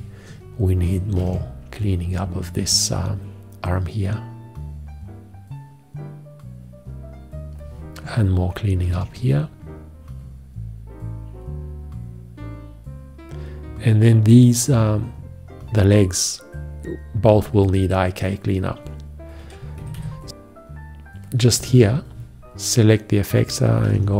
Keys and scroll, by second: 1.2 alt+q, 8.9 alt+q, 19.8 F1, 23.9 alt+q.